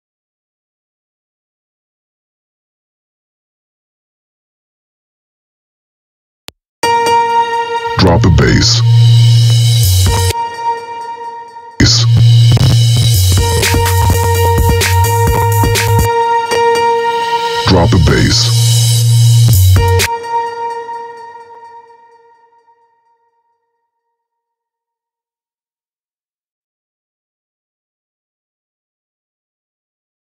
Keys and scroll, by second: 5.9 space, 9.7 space, 11.6 space, 19.7 space.